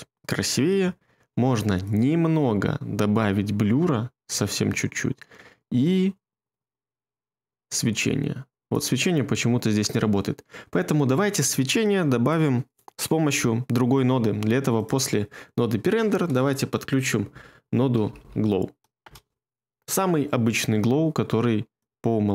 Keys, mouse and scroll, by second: 16.3 space, 17.7-18.8 typing, 19.0 Return.